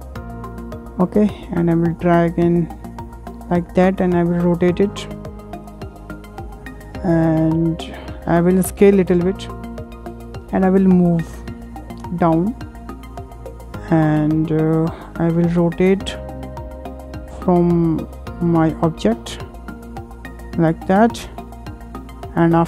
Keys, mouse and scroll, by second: 0.3 click, 1.7 click, 3.0-4.1 shift+middle drag, 4.1 click, 8.6 s, 10.2 w, 10.5 w, 11.2 click, 12.7-15.9 middle drag, 15.9-17.3 drag, 18.5 w, 19.5 click, 21.7-22.6 middle drag.